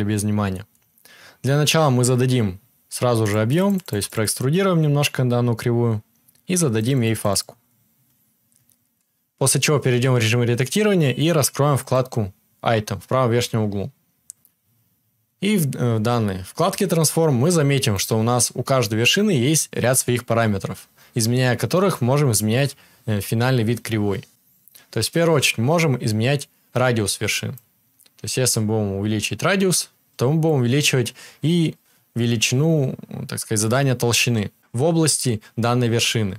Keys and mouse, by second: 9.8 Tab, 18.0-27.6 right drag.